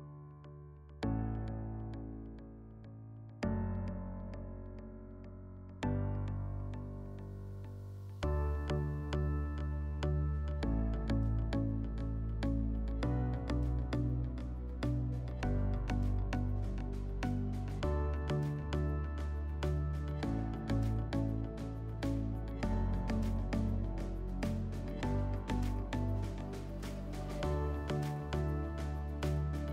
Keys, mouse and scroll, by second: 9.9 click, 11.4 click, 14.0-15.6 drag, 15.8 click, 16.9 click, 18.0 click, 24.9-26.6 drag, 28.3-29.7 drag.